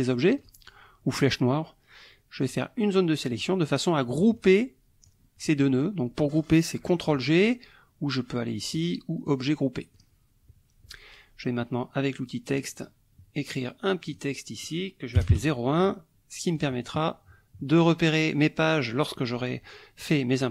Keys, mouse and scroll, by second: 0.4 click, 2.4-3.6 drag, 4.4 click, 9.2 click, 9.9 click, 12.5 click, 14.1 click, 15.2 KP_0, 15.3 KP_1, 16.6 click, 20.1 click.